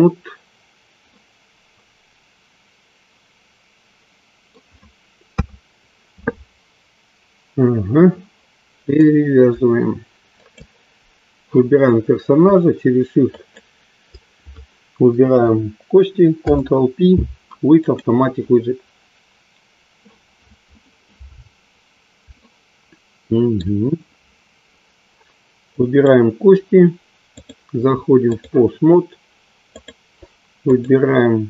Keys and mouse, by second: 1.8-4.6 middle drag, 6.5 KP_3, 8.8 click, 13.4 shift+click, 16.2 ctrl+p, 22.4-24.2 shift+middle drag, 25.8 click, 27.2-28.5 drag, 29.6-30.7 drag.